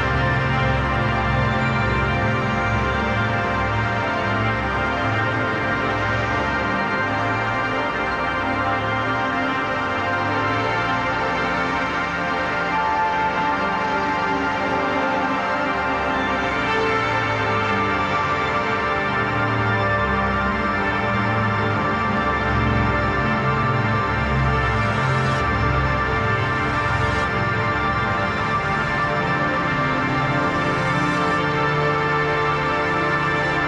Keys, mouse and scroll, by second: 0.2 ctrl+a, 1.0 click, 1.2-2.5 typing, 2.7-10.0 drag, 10.0 Left, 10.8 ctrl+-, 11.8 click, 12.2 space, 12.3 click, 12.5 space, 13.1 click, 13.6 Down, 14.7 click, 21.3 ctrl+=, 22.0 space, 22.2 click, 22.4 space, 23.0-25.6 drag, 26.5 ctrl+a, 27.8-30.6 typing, 30.8 ctrl+a, 31.6 click, 33.1-33.6 typing.